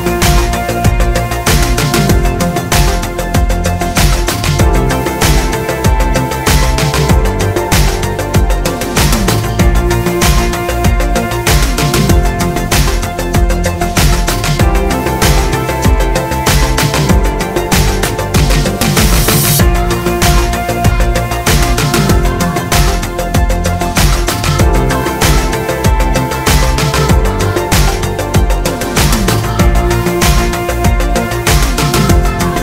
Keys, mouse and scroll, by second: 1.3 g, 4.0 click, 4.7 click, 5.4-7.5 middle drag, 7.5-8.7 drag, 13.4 h, 15.4 scroll up 1, 15.7 z, 16.4 click, 16.8 Tab, 17.5 click, 17.8 shift+click, 18.1 shift+click, 18.5 shift+click, 19.0 shift+d, 20.3 click, 20.7 Tab, 24.5 click, 24.8 click, 25.4 g, 28.3 shift+Tab, 28.5 g, 30.9 shift+click, 31.4 Tab.